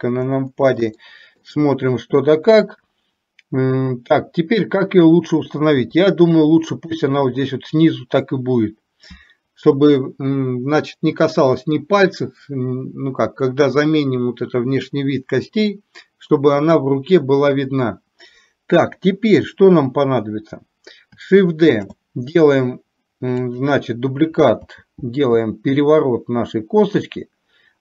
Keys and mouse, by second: 1.1 shift+middle click, 5.9 r, 21.8 shift+d, 24.8 r.